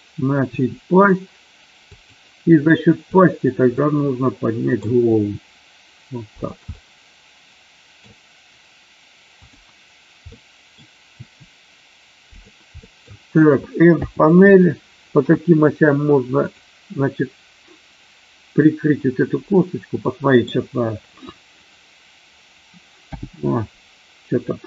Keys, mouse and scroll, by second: 0.6 r, 1.9-2.8 drag, 3.7-5.1 middle drag, 5.1 r, 6.7-7.9 middle drag, 9.4 click, 10.2 middle click, 11.0 r, 12.8 middle drag, 13.9 n, 16.4 click, 20.0 middle click, 20.4-23.0 scroll down 1, 23.0 n.